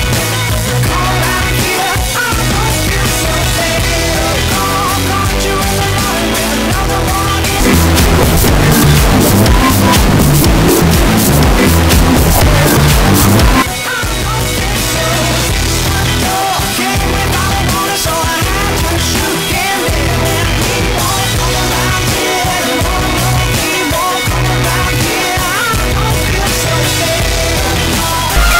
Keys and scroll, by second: 14.0 Page_Down.